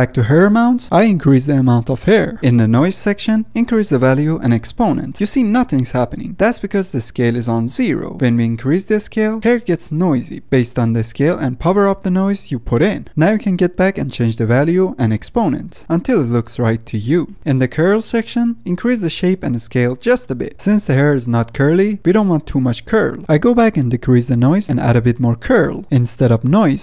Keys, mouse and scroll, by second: 2.4 g, 2.5 middle click, 2.9 click, 3.1-4.2 middle drag, 4.2-9.1 drag, 10.5-11.5 middle drag, 11.5 scroll up 2, 11.7-13.3 middle drag, 13.3-17.3 drag, 17.3 middle click, 17.4 scroll down 5, 17.8-18.2 scroll up 6, 18.0 middle click, 18.2-19.8 drag, 20.1 middle click, 20.8-23.4 drag, 23.4 middle click, 24.0-24.6 scroll up 1, 24.6-25.7 drag, 26.2 click.